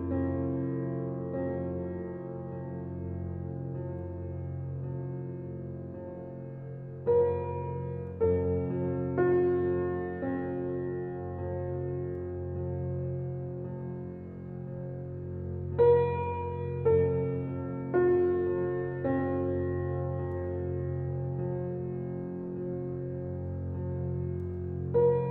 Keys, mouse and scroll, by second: 1.4 click, 2.6 drag, 5.4 drag, 7.6 alt+middle click, 8.1 scroll down 4, 8.4-10.0 shift+middle drag, 10.1 click, 11.1-12.5 drag, 12.5-13.2 scroll down 1, 13.2 middle click, 14.0 click, 14.2-14.5 scroll down 4, 15.2 shift+middle drag, 15.4-15.7 scroll down 5, 15.7-20.5 shift+middle drag, 20.5 click, 21.2 shift+middle drag, 21.3-22.0 scroll up 6, 22.0 click, 22.5 shift+middle drag, 22.7 scroll up 2, 22.9 Tab, 23.4 scroll up 2, 24.2 shift+middle click, 24.4-25.3 scroll up 5.